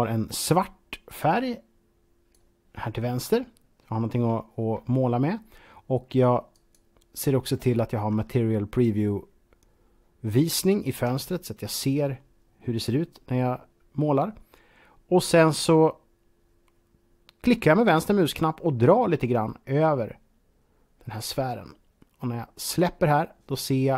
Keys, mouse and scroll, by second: 1.1 click, 6.3 click, 10.1 scroll down 1, 10.5 shift+middle click, 11.1-11.7 scroll up 4, 18.5 scroll up 4, 18.6-22.8 drag.